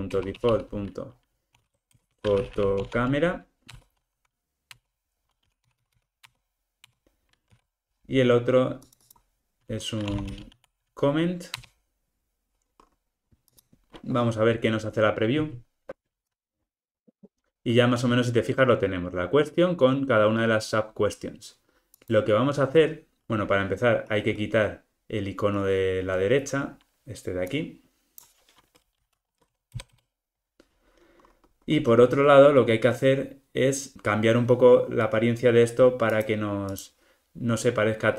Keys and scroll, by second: 0.2 Return, 3.8 Return, 7.4 super+d, 11.5 Return.